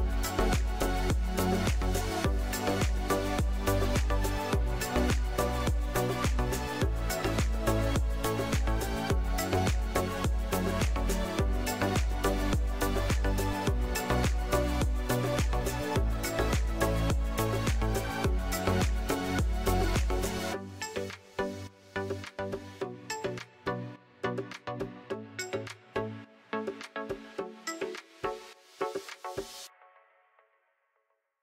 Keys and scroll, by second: 0.8 Tab, 1.4 Tab, 3.5 KP_7, 3.9 shift+z, 6.2 shift+d, 7.0 Tab, 8.2 Tab, 9.0 p, 9.8 Tab, 12.8 a, 13.5 s, 17.0 s, 19.5 s, 23.4 s, 26.9 s, 29.3 shift+z.